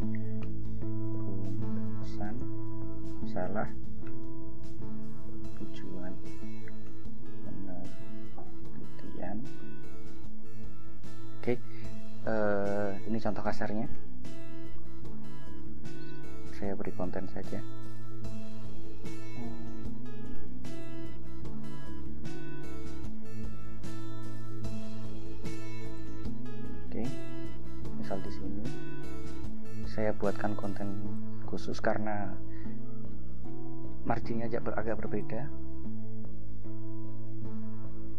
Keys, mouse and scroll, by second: 0.0-11.5 typing, 0.6 ctrl+shift+BackSpace, 4.2 Return, 13.0 click, 14.1 Return, 17.9 click, 19.7 ctrl+v, 24.9 click, 26.0 click, 28.5-29.8 drag, 31.3 click, 35.3 click, 37.7-38.1 typing.